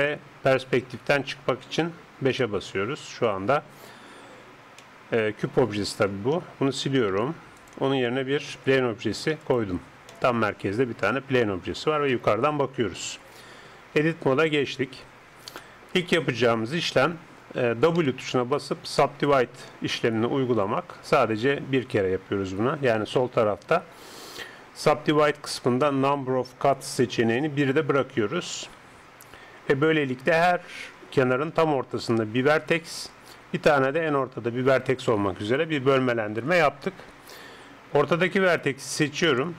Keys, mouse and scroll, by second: 2.4 KP_5, 3.6-6.1 middle drag, 6.1 KP_7, 7.1 x, 8.5 shift+a, 10.1-11.3 middle drag, 11.3 KP_7, 13.9 Tab, 15.2 click, 15.6-17.4 middle drag, 18.0 w, 39.1 right click.